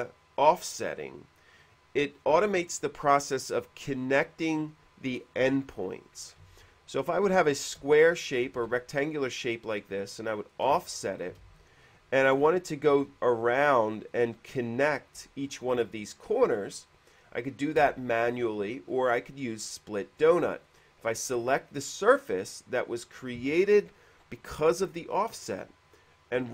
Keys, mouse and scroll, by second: 7.6 middle click, 8.8 f, 9.4 click, 11.4 click, 11.6 space, 12.5 middle click, 13.2 q, 14.3 click, 15.8 q, 15.8 space, 18.0 q, 18.1 space, 22.8 space.